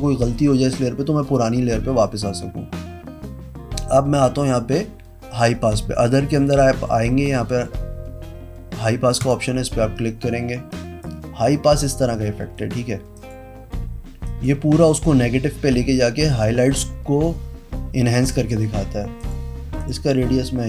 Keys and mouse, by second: 9.2 click, 10.7 click, 11.8 click, 12.5 click, 13.1 click, 14.2 click, 18.2 click, 19.1 click, 19.7 click.